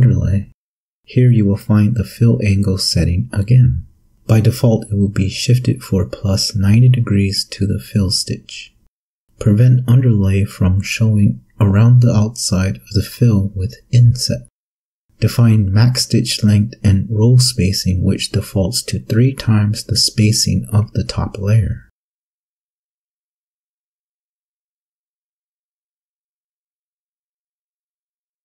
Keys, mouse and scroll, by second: 10.3 click, 11.3 1, 20.9 click, 27.3 click.